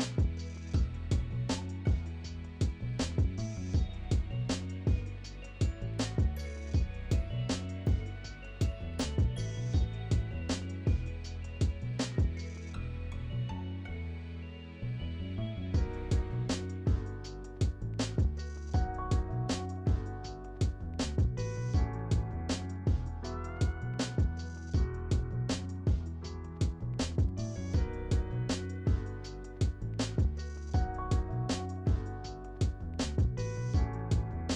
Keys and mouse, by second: 2.2-2.7 middle drag, 3.3 click, 8.9-9.9 drag, 15.0-15.6 drag, 17.2-18.7 middle drag, 20.5 click, 21.8 shift+a, 24.3 s, 28.1 click, 29.1 click, 30.1 click.